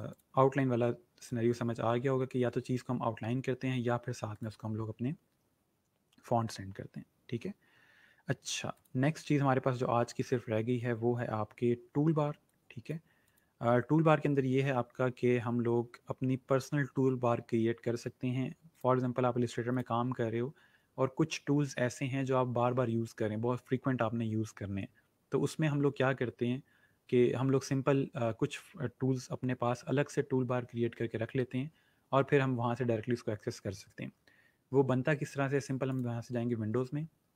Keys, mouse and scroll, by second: 0.1 click, 4.3 click, 8.8 click, 12.4 click, 18.8 click, 35.9 click.